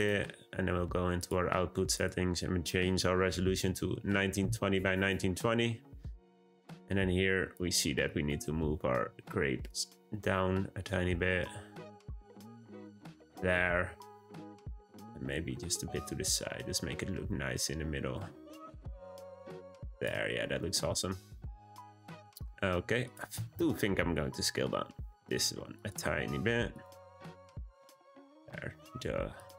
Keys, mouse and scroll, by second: 1.1 click, 1.9 click, 6.5 drag, 8.0 drag, 9.0 g, 14.7 g, 19.9 click, 23.0 click, 23.6-24.4 scroll up 1, 24.4 s, 25.9 r, 26.8 g, 28.0 click, 28.8-29.3 scroll down 1, 29.3 click.